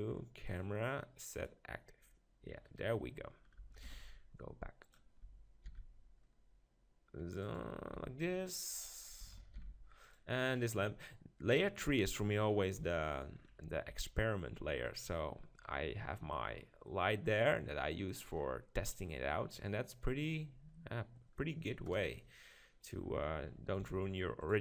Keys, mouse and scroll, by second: 2.7-4.7 right drag, 3.8 shift+f, 4.9 click, 5.2-6.7 right drag, 5.6 shift+f, 7.5-9.4 drag, 8.0 g, 10.6-12.4 drag, 10.6 shift+f, 12.8 KP_7, 13.7-15.0 middle drag, 13.9 g, 15.0-16.8 drag, 16.8 middle click, 22.0 KP_0, 23.8 g.